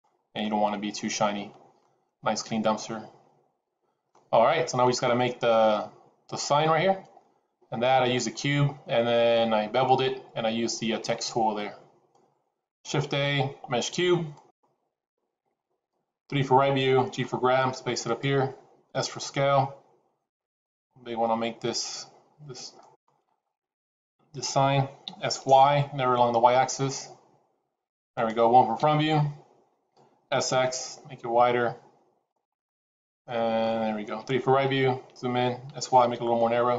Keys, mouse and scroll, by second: 0.3 middle click, 2.8 middle click, 3.5 scroll down 1, 4.0 middle click, 12.6 shift+a, 16.1 KP_3, 17.0 g, 18.8 s, 25.0 s, 28.7 KP_1, 30.2 s, 32.6 middle click, 34.0 KP_3, 34.7-35.4 scroll up 3, 35.6 s.